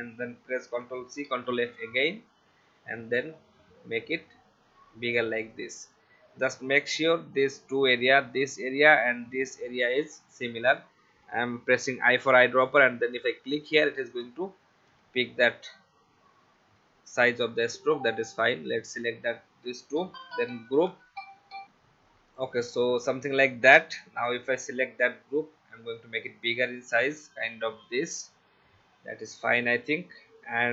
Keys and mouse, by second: 0.7 ctrl+c, 1.3 ctrl+f, 3.0 alt+shift+click, 13.7 click, 14.2 v, 18.2 shift+click, 20.7 ctrl+g, 21.6 F10, 22.3 click.